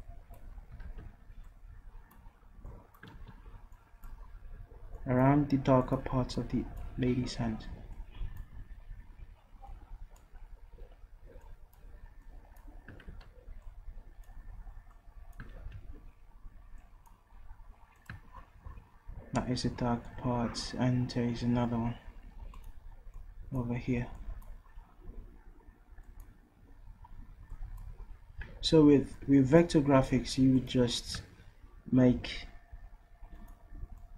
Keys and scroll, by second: 1.6 ctrl+z, 4.1 ctrl+z, 13.5 ctrl+z, 15.7 ctrl+z.